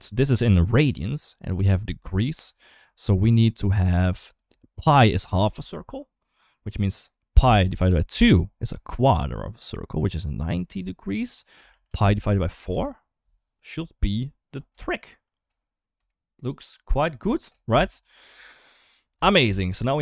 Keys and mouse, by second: 1.9 shift+middle click, 2.6 click, 3.5-12.5 drag, 14.6 shift+middle click, 15.9 shift+middle click, 16.5 shift+middle click, 17.1 shift+middle click, 18.0 ctrl+s, 18.3 shift+middle click, 18.6 shift+middle click, 19.3 shift+middle click, 19.7 middle click.